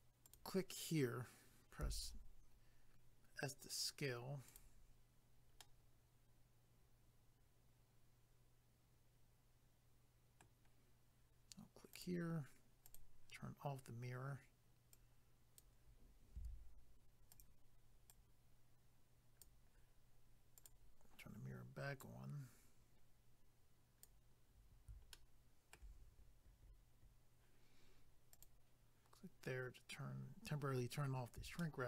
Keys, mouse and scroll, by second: 0.2 click, 0.3 click, 4.5 click, 4.6 click, 5.6 middle click, 11.9 click, 12.0 click, 12.9 click, 13.0 click, 14.9 click, 16.4 s, 17.3 click, 17.4 click, 18.1 click, 20.6 click, 20.7 click, 22.0 click, 25.1 shift+middle click, 26.6 scroll up 1, 28.3 click, 28.4 click, 31.6 shift+middle click.